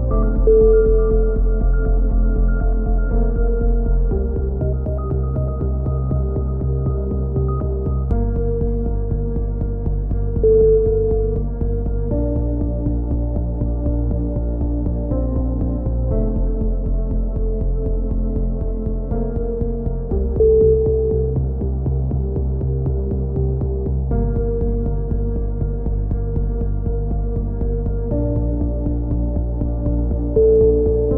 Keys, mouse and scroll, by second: 0.9 click, 5.1-7.9 right drag, 7.9 KP_3, 9.1-10.5 drag, 9.4 z, 12.3-13.5 drag, 13.0 z, 13.5 middle click, 14.3 click, 15.0 middle click, 15.1 click, 15.9 middle click, 16.3-17.8 drag, 16.6 z, 17.7 a, 17.8-19.1 middle drag, 18.2 z, 18.8 Tab, 19.1 click, 21.0 KP_1, 21.8 z, 23.6-29.8 middle drag, 29.8 click.